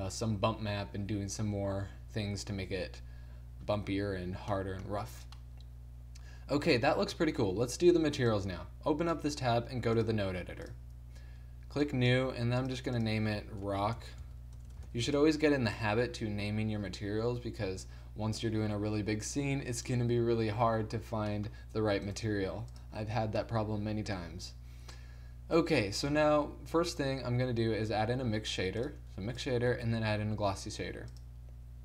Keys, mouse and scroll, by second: 8.3-16.1 drag, 14.7 BackSpace, 16.1 n, 17.9 middle click, 22.1 right click, 22.3 g, 26.1 shift+a, 29.8-31.3 drag, 29.8 shift+a.